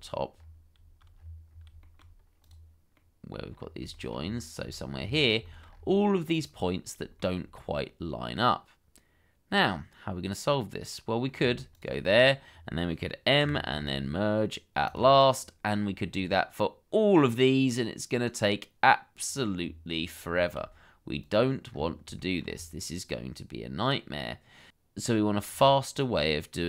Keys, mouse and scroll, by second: 0.3-0.7 scroll up 1, 1.1-1.5 scroll down 1, 1.8 shift+middle click, 2.9 middle click, 3.5 scroll up 1, 3.9 shift+middle click, 4.1-4.6 shift+scroll up 1, 4.6-5.1 scroll up 2, 4.7 shift+middle click, 5.4 shift+middle click, 5.7-6.2 scroll up 1, 7.2 shift+middle click, 7.7 middle click, 11.7 shift+click, 13.4 m, 16.1-17.7 scroll down 1, 17.7 middle click, 19.5-19.9 scroll down 1, 20.3 shift+middle click, 21.7-22.0 scroll up 1, 22.2 shift+middle click, 22.5-23.0 scroll up 1, 24.7-25.8 scroll down 1.